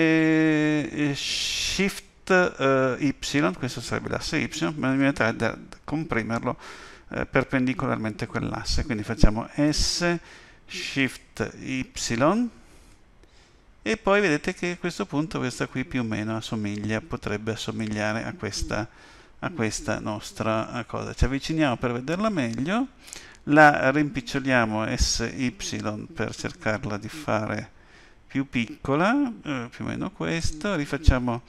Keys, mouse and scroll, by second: 9.7 s, 19.5-20.8 scroll up 3, 20.8 scroll up 1, 24.9 s.